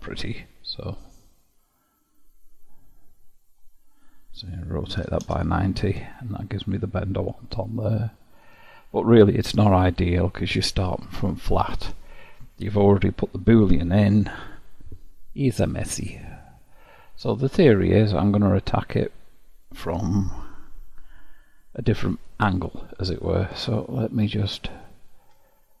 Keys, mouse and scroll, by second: 2.4-6.3 drag, 6.3-9.0 middle drag, 9.0-10.9 scroll up 5, 10.9-12.1 scroll up 1, 14.6-15.3 scroll down 3, 15.3-17.8 middle drag, 17.8-18.9 scroll down 2, 18.9-20.7 scroll down 1, 23.8-25.8 drag.